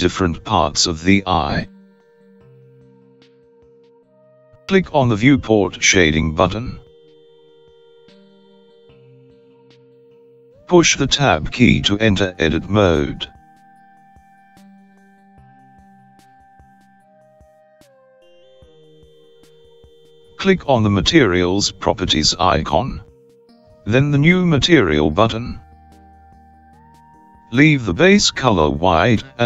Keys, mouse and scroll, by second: 7.5 click, 14.5 Tab, 19.6-21.9 scroll up 7, 23.4 click, 26.1 click, 27.6-28.2 scroll down 1, 28.2 scroll down 4, 29.3-29.4 scroll down 1.